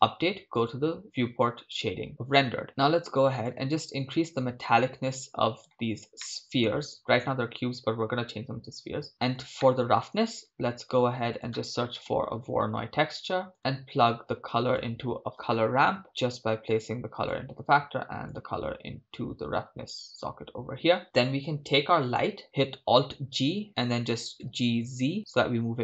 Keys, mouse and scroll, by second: 5.7 scroll up 3, 6.2 shift+middle click, 9.6 middle click, 22.4 click, 23.1 alt+g.